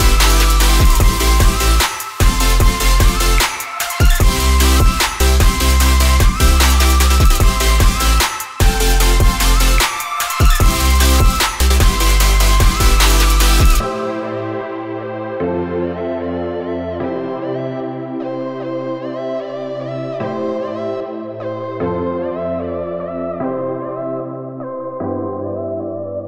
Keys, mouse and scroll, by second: 3.4 ctrl+t, 6.1 Return, 8.2 shift+click, 9.2 ctrl+t, 14.2 Return, 20.6 ctrl+t.